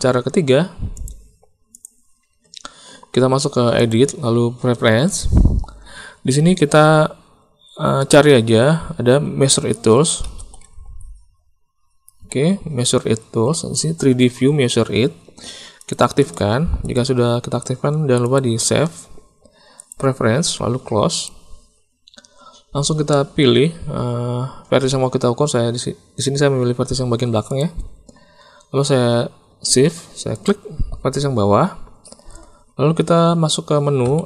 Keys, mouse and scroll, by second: 1.0 click, 1.7 click, 3.9-5.3 drag, 23.1 middle click, 30.3 shift+click, 34.0 n.